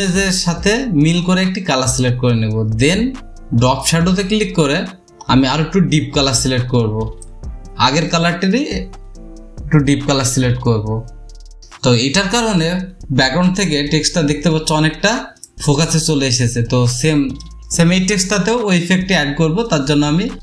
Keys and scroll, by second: 17.5 space.